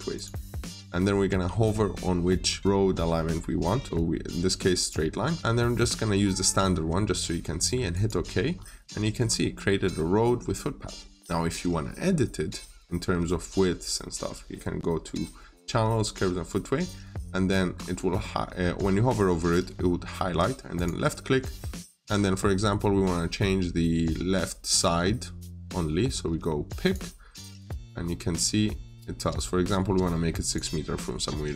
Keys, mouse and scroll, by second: 8.3-8.7 scroll up 1, 15.8 click, 17.6 scroll down 1, 17.8 middle click, 20.6 click, 27.8-28.7 scroll up 1, 30.3 click.